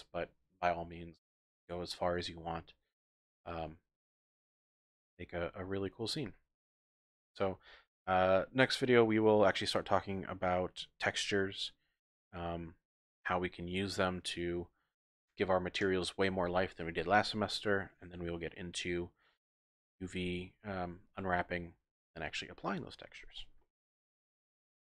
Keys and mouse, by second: 3.6-4.4 drag, 4.4-5.2 middle drag, 5.2-6.2 drag.